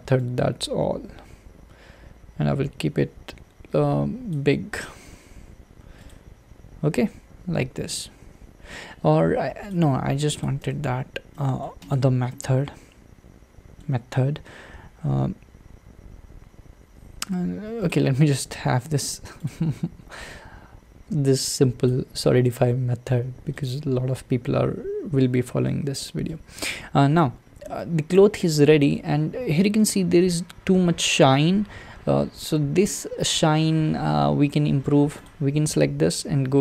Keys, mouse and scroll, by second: 4.8 click, 5.1 Tab, 5.6 Tab, 6.5-6.9 scroll down 3, 6.9-9.7 middle drag, 9.7-10.4 drag, 10.6 Tab, 10.9-11.3 scroll up 3, 11.3-11.9 middle drag, 11.9 click, 12.3-17.4 middle drag, 19.5-23.2 drag, 23.2 Tab, 23.9-25.1 scroll down 2, 25.1-25.7 scroll down 1, 25.7-29.2 middle drag, 29.2-29.8 scroll up 3, 29.8-35.2 middle drag, 35.2 click.